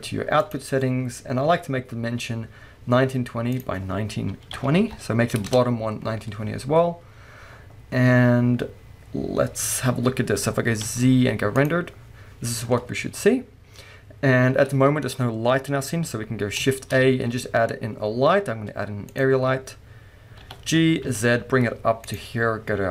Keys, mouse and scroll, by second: 3.6-22.1 drag, 5.6 Return, 6.8 scroll down 1, 10.2-10.6 scroll up 1, 10.9 z, 16.7 shift+a, 19.7-20.4 scroll down 1, 20.4 g.